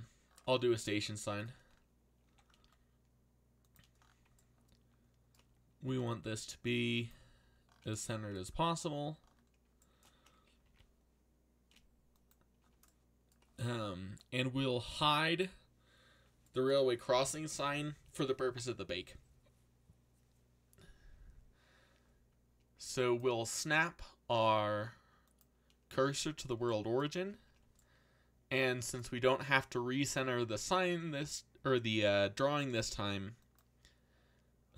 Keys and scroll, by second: 2.0-3.0 typing, 5.6-6.6 typing, 10.6 alt+a.